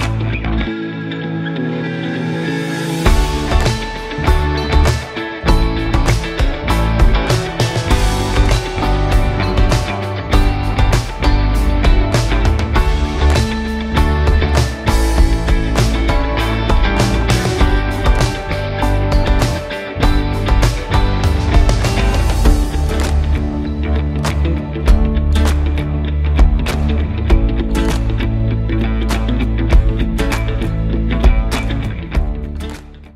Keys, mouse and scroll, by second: 0.9-1.3 scroll down 1, 1.7-2.3 middle click, 2.2 scroll down 1, 2.4-2.9 scroll up 1, 2.9 middle click, 3.3-3.7 scroll down 1, 4.1 middle click, 4.5 scroll up 1, 5.3 scroll down 1, 7.8-8.4 scroll up 1, 8.4-10.2 scroll down 1, 10.9-12.3 scroll up 1, 12.8 click, 14.0 scroll down 1, 14.3-15.5 alt+drag, 15.6 scroll up 1, 16.1-16.6 alt+middle click, 16.5 scroll up 1, 18.1 scroll down 1.